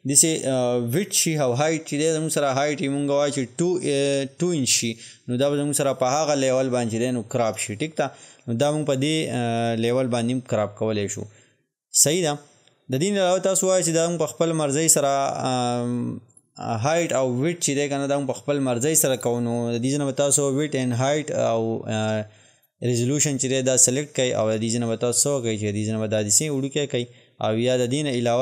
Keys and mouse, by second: 12.0 click, 22.6 click, 25.1-28.4 drag.